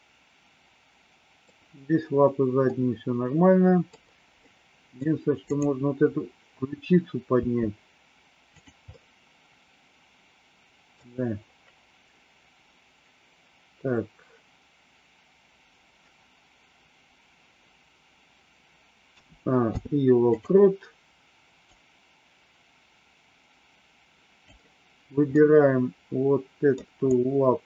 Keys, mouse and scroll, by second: 2.7-4.0 middle drag, 4.4 middle click, 5.5 click, 7.2 r, 8.8-11.0 middle drag, 19.0 a, 19.6 i, 21.7-24.4 drag, 25.2-26.7 middle drag, 27.1 click.